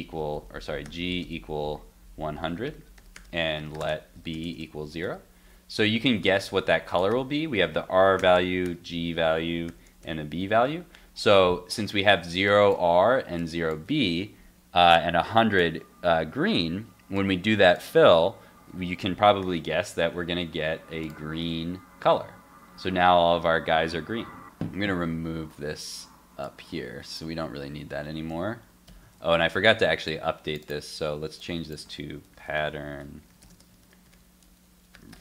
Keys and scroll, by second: 10.4 super+s, 19.4 super+s, 19.8 super+Tab, 21.4 super+r, 24.6 super+Tab, 27.2 super+x, 29.0 super+s.